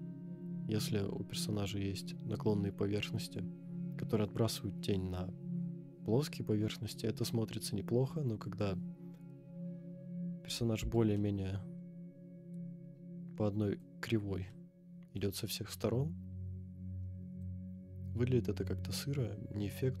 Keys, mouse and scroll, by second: 0.1 scroll up 2, 1.4-2.1 middle drag, 1.4-2.0 scroll up 1, 9.1-9.5 scroll down 4, 10.2 scroll down 1, 11.1-13.8 middle drag, 11.1-12.7 scroll down 1, 14.3 scroll up 1, 14.5-15.2 middle drag, 15.7-17.4 middle drag, 18.2-18.8 scroll up 3.